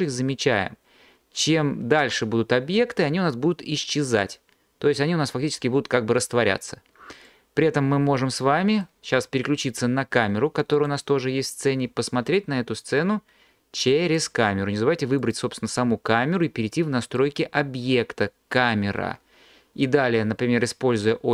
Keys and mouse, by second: 7.3 middle click, 10.8 click, 15.2 click.